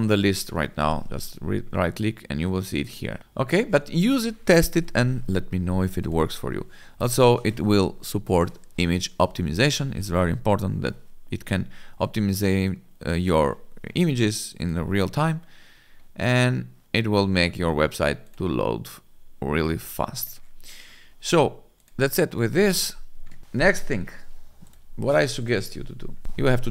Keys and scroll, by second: 0.7 F5.